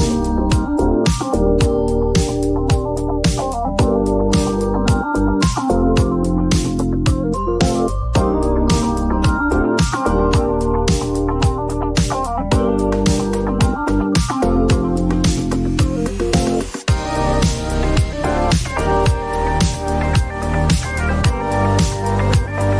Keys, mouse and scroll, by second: 1.1 click, 1.5-2.3 typing, 3.4 click, 3.9-4.3 typing, 6.3 click, 8.2 click, 10.9 click, 12.6 click, 13.2 typing, 14.5 click, 15.5-16.4 typing, 20.1 click, 20.5 typing.